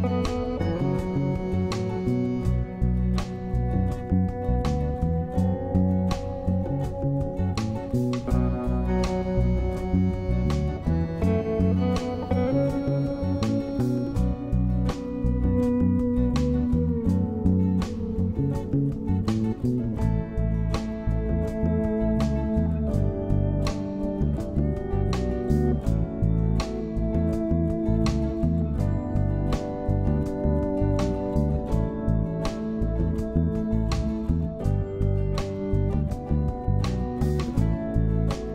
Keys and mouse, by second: 6.9 click, 8.5 shift+click, 15.5-18.1 drag, 18.4 shift+middle click, 22.2-24.2 middle drag, 24.7 click, 25.8 shift+click, 26.7-27.3 middle drag, 27.4 middle click.